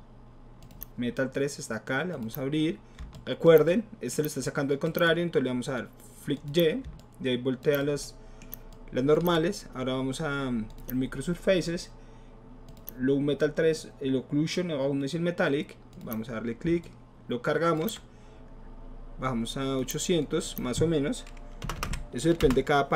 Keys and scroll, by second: 21.7 BackSpace, 21.8 BackSpace, 21.8 KP_8, 22.4 Return.